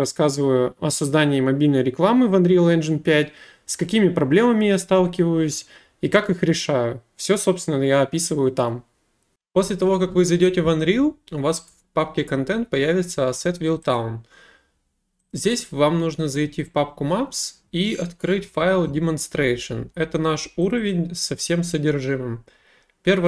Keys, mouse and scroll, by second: 9.0 click, 14.0 click, 15.3 click, 15.5 click, 20.7 click, 20.9 click.